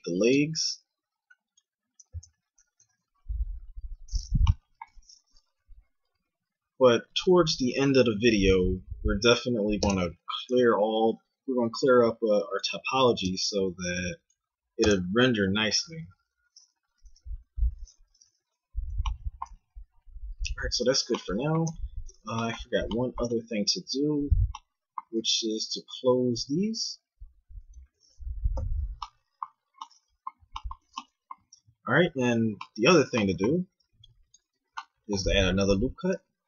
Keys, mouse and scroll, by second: 2.8 a, 5.5 k, 10.4 a, 11.9 k, 18.4 a, 18.8 Tab, 19.5 z, 21.7 Tab, 28.5 f, 29.4 a, 31.5 ctrl+Tab, 33.8 ctrl+r, 36.1 ctrl+b.